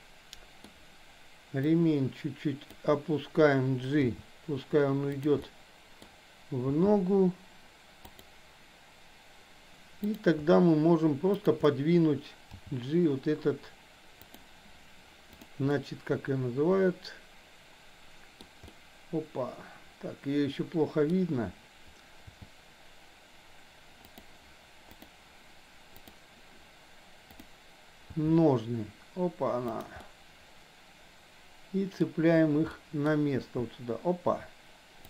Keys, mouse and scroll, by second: 0.0 middle click, 1.7-2.7 drag, 4.0 g, 5.5 middle click, 6.9 g, 10.1 click, 11.4 shift+click, 12.5 g, 15.7-18.5 middle drag, 18.6-21.1 middle drag, 22.4 g, 25.0 click, 25.9 click, 27.4 click, 28.2 g, 30.0-32.1 middle drag, 30.0 scroll up 1, 32.7 scroll up 1, 32.9 middle click, 33.0 scroll down 1, 33.5 g.